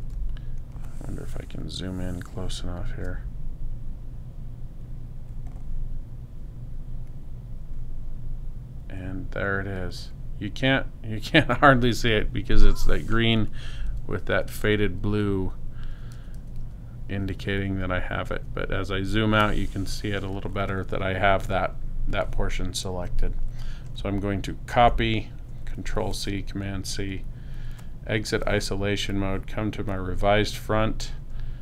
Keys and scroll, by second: 13.9 super+-, 24.7 super+c.